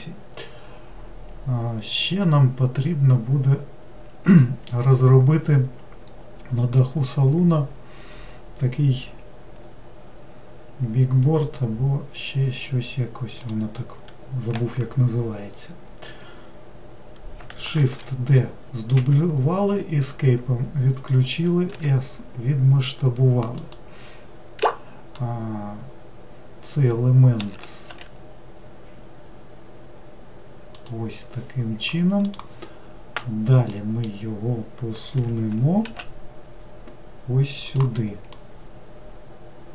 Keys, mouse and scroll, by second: 13.4 click, 17.8 shift+d, 21.7 s, 27.4 s, 33.7-35.2 middle drag, 35.2 g, 38.3-39.7 middle drag.